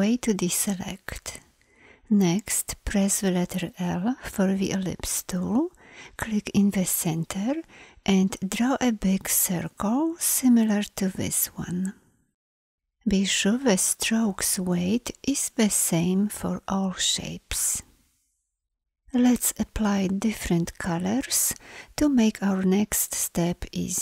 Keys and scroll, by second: 2.8 l.